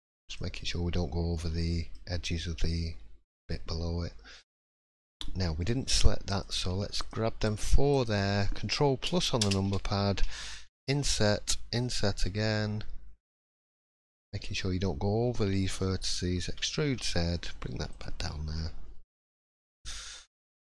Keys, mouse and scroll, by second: 1.3 middle click, 2.6 middle click, 6.3 click, 7.0 shift+click, 8.3 shift+click, 9.4 ctrl+KP_Add, 10.8 i, 17.0 e, 18.2-18.9 scroll down 5, 18.5 middle click, 19.2-19.7 scroll up 2, 19.6 click, 20.1 shift+middle click.